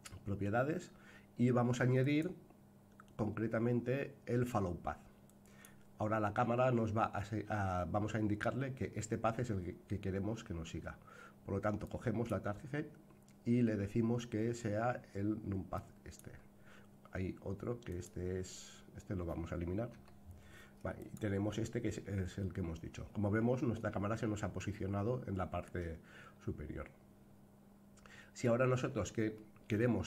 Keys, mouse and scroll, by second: 2.0-5.6 drag, 11.8-16.2 drag, 17.8 click, 19.9 Delete, 20.9 click, 29.3-30.0 middle drag.